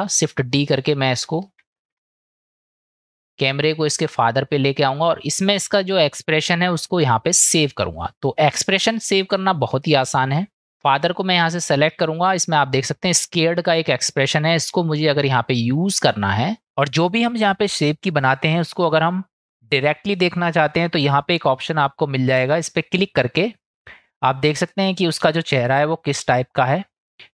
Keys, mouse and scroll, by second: 1.8 shift+d, 4.2 click, 23.5 click.